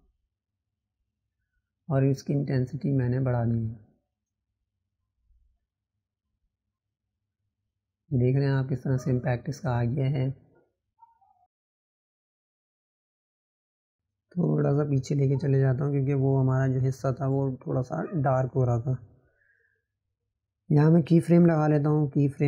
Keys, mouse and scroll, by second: 4.8-5.7 drag, 14.6 ctrl+v, 16.5 click, 18.2-19.1 drag.